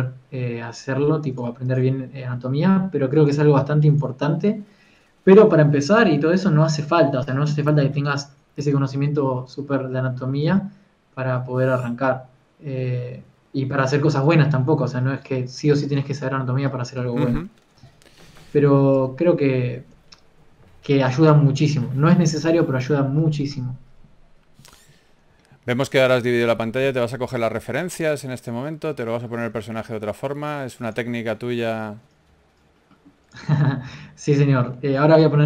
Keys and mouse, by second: 0.6 r, 2.8 r, 4.0 g, 4.6 a, 11.8 shift+a, 18.6-19.6 drag, 19.6 t, 20.5 t, 25.8 KP_0, 26.0 KP_0, 27.0 shift+f, 28.2 s, 30.0 g, 32.0 g, 32.9 g, 33.7 g.